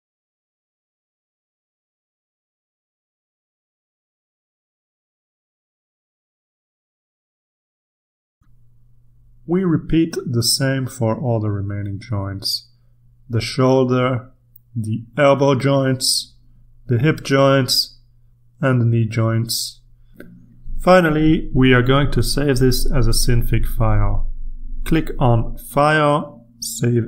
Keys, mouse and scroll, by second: 3.3 click, 3.9 click, 5.3 click, 5.6 click, 6.0-8.3 drag, 8.4 ctrl+r, 9.1-10.4 ctrl+scroll down 2, 11.8 click, 13.1 click, 14.4 click, 16.1 click, 17.3-18.0 scroll down 1, 18.2 click, 19.3 click, 21.1-21.7 ctrl+scroll down 2, 21.7-22.5 ctrl+scroll up 2, 23.5 click, 25.3 click.